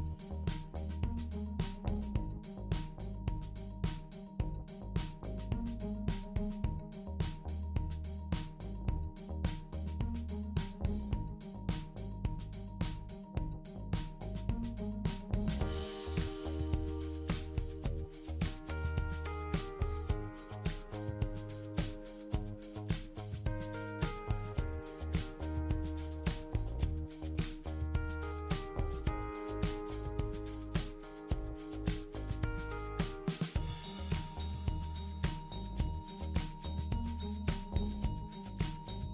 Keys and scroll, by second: 4.0 f, 7.8 f, 8.0 f, 11.2 f, 11.4 f, 22.0 Right, 22.0 Right, 22.2 Right, 22.3 Right, 22.4 Right, 22.7 Up, 22.8 Up, 22.9 Up, 23.0 Up, 23.1 Up, 23.2 Up, 23.5 Down, 23.6 Down, 23.7 Down, 23.8 Down, 24.4 Up, 24.8 Up, 24.8 Up, 25.0 Up, 25.6 Left, 25.9 Left, 26.0 Left, 26.1 Left, 26.1-29.2 Left, 32.4 super+Up, 32.6 super+Up, 32.6 super+Up, 33.6 super+Down, 33.8 super+Down, 34.0 super+Down.